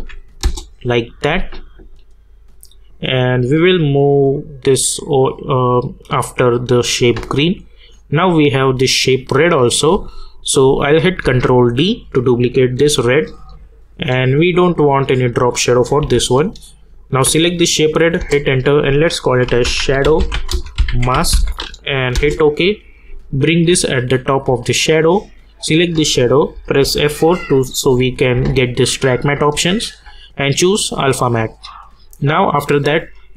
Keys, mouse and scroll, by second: 0.0-0.4 typing, 0.4 Return, 3.1-7.9 drag, 10.6 ctrl+Num_Lock, 10.6 click, 11.2 ctrl+d, 14.7 click, 18.2 Return, 19.2-21.8 typing, 22.1 Return, 23.1-24.6 drag, 26.5 F4, 30.0 click.